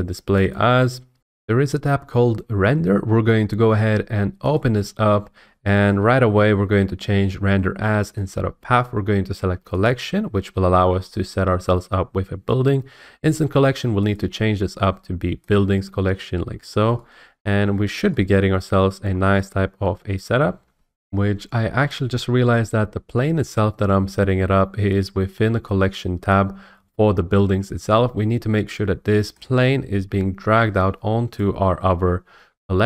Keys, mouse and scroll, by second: 0.5 click, 4.5 click, 8.2 click, 9.8 click, 10.9-11.9 scroll, 12.0-13.1 scroll up 3, 14.1 click, 15.5 click, 17.4-17.8 scroll, 18.8-19.5 scroll, 20.9 F8, 31.4 click.